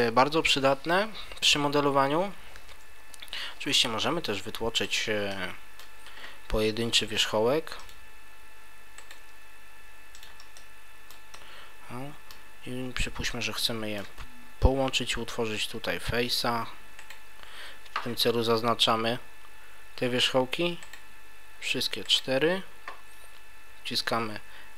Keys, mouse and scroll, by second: 3.0 Tab, 3.7-4.5 scroll up 1, 4.5-4.8 scroll up 2, 4.8 right click, 5.3 middle click, 7.1 e, 7.9 click, 9.0 right click, 9.2 e, 10.2 click, 10.5 middle click, 11.3 shift+middle click, 13.4 middle click, 17.0 shift+right click, 20.8 shift+right click, 22.0 shift+right click.